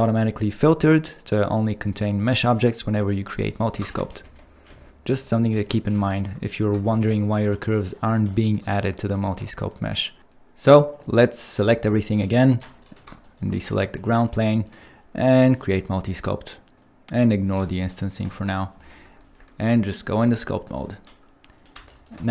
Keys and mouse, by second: 4.0 ctrl+z, 4.2 ctrl+z, 4.7 ctrl+z, 5.1 ctrl+z, 5.6 ctrl+z, 6.2 ctrl+z, 7.0 ctrl+z, 7.8 click, 13.7 shift+middle drag, 16.7-17.3 drag, 18.3 click, 21.7 ctrl+Tab, 21.9 click.